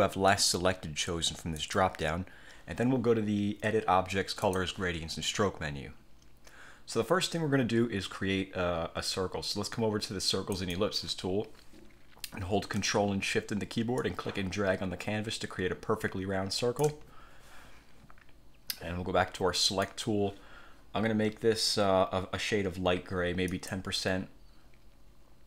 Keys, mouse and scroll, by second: 0.4 click, 1.7 click, 4.6 click, 10.7 click, 14.1-17.1 ctrl+shift+drag, 19.8 click, 23.6 click.